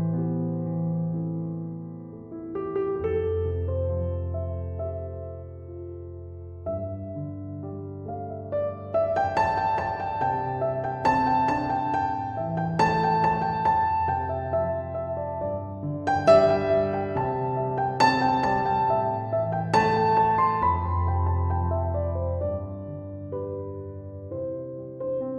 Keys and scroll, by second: 2.2 ctrl+7.